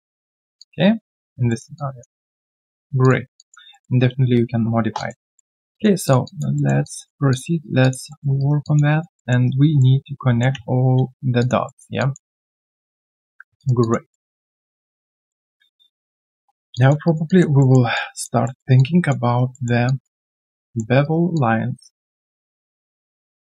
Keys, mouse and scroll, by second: 0.5 alt+click, 1.4 alt+middle click, 1.7 alt+click, 3.3 alt+click, 3.7 alt+middle click, 4.9 alt+click, 5.2 alt+middle click, 5.5 alt+scroll down 1, 5.7 alt+click, 6.2 alt+click, 6.5 alt+middle click, 6.8 alt+click, 7.6 alt+right click, 7.8 alt+click, 8.1 alt+middle click, 8.4 alt+right click, 8.6 alt+click, 8.9 alt+right click, 9.1 alt+middle click, 9.4 alt+right click, 9.8 alt+middle click, 10.4-11.1 scroll down 3, 11.4 alt+click, 11.6 alt+middle click, 11.9 alt+click, 12.4 alt+middle click, 12.6 alt+scroll down 1, 13.2 ctrl+a, 13.5 alt+right click, 13.8 alt+click, 14.1 alt+middle click, 14.2 alt+scroll down 1, 15.1 alt+middle click, 15.8-16.3 scroll down 1, 16.3 1, 16.7 alt+click, 17.0 alt+right click, 17.2 alt+click, 17.6 alt+middle click, 17.9 alt+click, 18.4 alt+middle click, 18.7 alt+click, 19.2 alt+right click, 19.5 alt+middle click, 19.8 alt+click, 20.3 alt+right click, 20.6 alt+middle click, 21.0 alt+right click, 21.3 alt+click, 23.4 alt+right click.